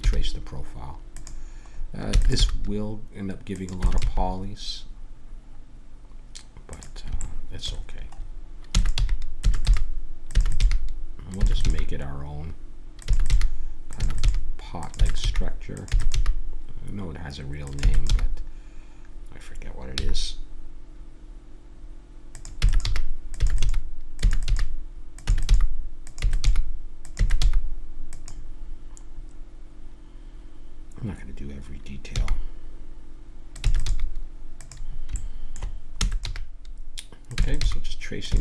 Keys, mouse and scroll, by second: 2.1 e, 2.4 g, 3.8 e, 4.0 g, 8.6-11.6 typing, 13.1-16.1 typing, 17.8 e, 18.1 g, 22.6-27.4 typing, 32.1 g, 33.6 e, 33.8 g, 35.1 middle click, 36.0 e, 36.3 g, 37.4-38.4 typing.